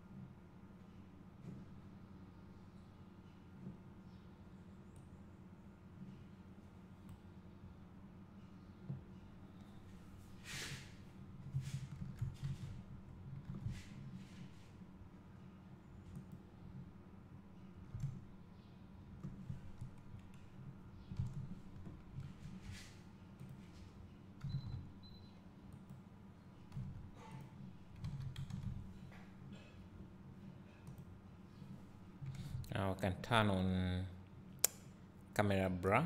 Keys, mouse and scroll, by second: 7.8-9.6 drag, 12.6 alt+a, 12.6 click, 13.6 scroll up 1, 14.1 click, 14.1 s, 21.2 KP_0, 24.3 click, 24.8 r, 26.5 click, 26.9 r, 28.1 click, 28.6 a, 29.0 s, 30.9 click.